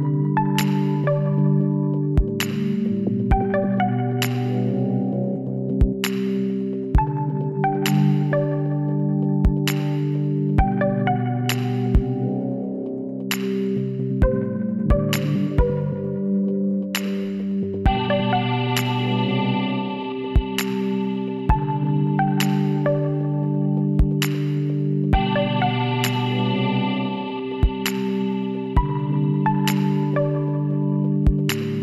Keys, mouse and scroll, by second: 0.8 click, 3.3 ctrl+n, 4.7 Tab, 6.4-8.1 drag, 8.1 middle click, 8.7 Tab, 11.8 right click, 12.3-14.2 drag, 13.4-16.8 right drag, 16.8-18.1 middle drag, 19.7 ctrl+z, 19.8 ctrl+z, 20.2 ctrl+z, 20.4 ctrl+z, 21.1 ctrl+z, 21.6 ctrl+z, 22.0 ctrl+z, 22.5 ctrl+z, 22.7 ctrl+z, 23.7 ctrl+z, 24.1 ctrl+z, 24.6 ctrl+z, 24.8 ctrl+z, 25.1 ctrl+z, 25.2 ctrl+z, 25.4 ctrl+z, 25.7 ctrl+z, 25.9 ctrl+z, 26.2 ctrl+z, 26.4 ctrl+z, 26.6 ctrl+z, 26.9 ctrl+z, 27.1 ctrl+z, 27.5 ctrl+z, 28.2 ctrl+z, 29.1 ctrl+z, 29.9-31.8 drag, 30.8 ctrl+z.